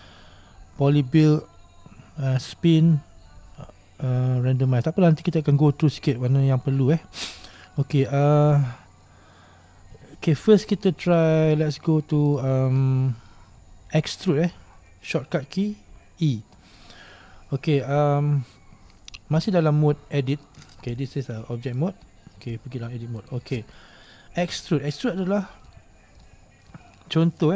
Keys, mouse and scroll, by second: 19.6-21.9 middle drag, 21.9 Tab, 23.4 Tab, 23.9 middle click.